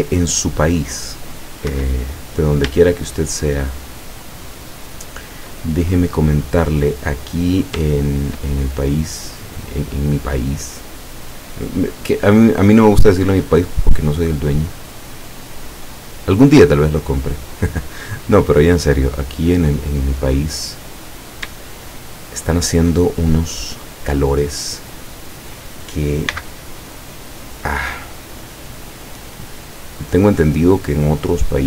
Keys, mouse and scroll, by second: 0.2-1.6 drag, 1.7 Escape, 3.2 shift+right click, 5.5 shift+scroll up 2, 5.6-7.9 shift+middle drag, 8.1 shift+right click, 8.6-9.2 shift+scroll down 3, 10.3-11.4 drag, 11.9 scroll down 1, 12.4 click, 13.3-16.1 drag, 16.2-16.6 scroll up 2, 17.2 shift+right click, 18.0-19.5 shift+middle drag, 19.5 scroll up 2, 20.3 middle click, 20.8-21.5 scroll up 2, 21.5 shift+scroll up 1, 21.8 shift+middle click, 23.0 shift+click, 24.3-25.3 drag, 26.3 c, 27.5-30.6 drag.